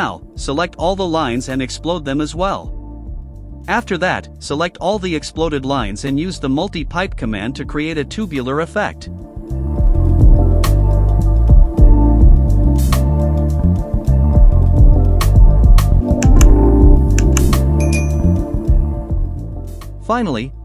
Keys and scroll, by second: 0.3 space, 2.4 typing, 8.2-10.2 typing, 11.0 Return, 14.1 KP_0, 14.3 KP_Decimal, 14.5 KP_2, 14.8 Return, 17.0 Delete.